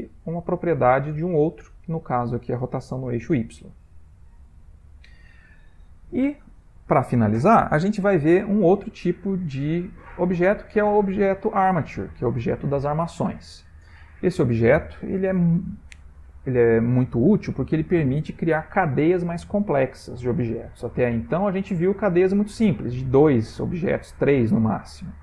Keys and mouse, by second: 3.8 middle click, 8.4 middle click, 9.5 ctrl+middle click, 10.3 shift+middle click, 10.9 shift+middle click, 12.8 middle click, 21.2-23.9 ctrl+middle click, 22.3 click, 23.5 middle click, 23.7 middle click, 24.7 middle click, 24.7 middle click, 24.9 middle click.